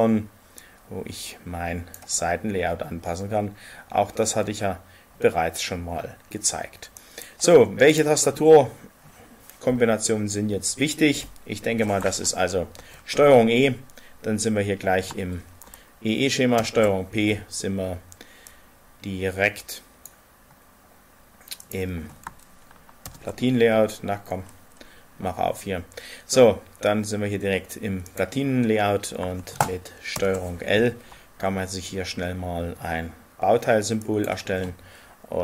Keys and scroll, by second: 12.8 ctrl+e, 16.5 ctrl+p, 23.0 ctrl+p, 30.1 ctrl+l.